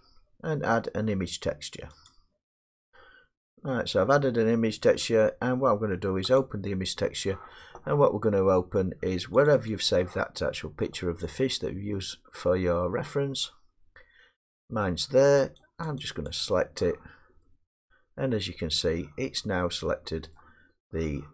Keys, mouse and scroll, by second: 2.1 click, 4.7 scroll, 6.4 click, 8.5 middle click, 9.4 click, 9.7 click, 14.6 click, 15.6-17.4 drag, 20.3 middle click.